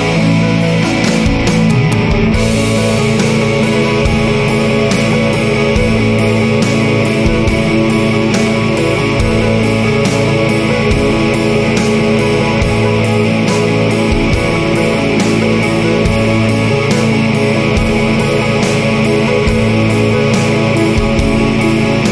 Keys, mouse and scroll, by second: 0.0 click, 0.9 click, 2.0 4, 3.0 click, 4.0 scroll down 2, 4.8 scroll up 2, 5.4 scroll down 2, 7.7-8.9 drag, 9.3-12.5 scroll down 8, 13.6 click.